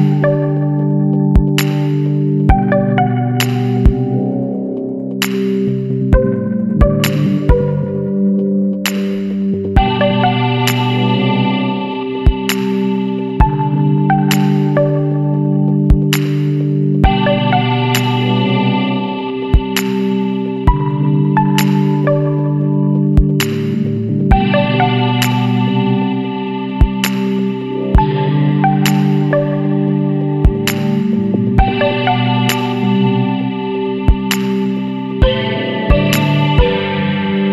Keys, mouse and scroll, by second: 2.7 click, 6.0 KP_8, 8.6 click, 11.1 scroll down 1, 11.8 scroll up 1, 12.6-14.8 drag, 15.3 scroll down 1, 18.6 click, 21.1 click, 24.4 click, 26.1 click, 27.5 click, 29.3 click, 30.4 click, 31.7 KP_3, 33.3 click, 34.4 click, 35.7 KP_6, 37.2 click.